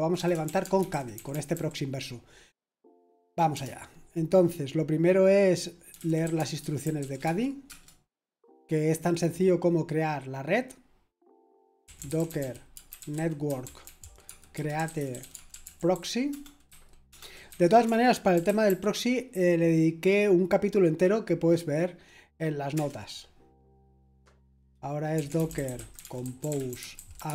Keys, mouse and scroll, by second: 0.0-2.0 typing, 3.3-4.0 typing, 5.6-7.9 typing, 11.6-19.2 typing, 22.7 Return, 23.8 Return, 24.9-27.3 typing.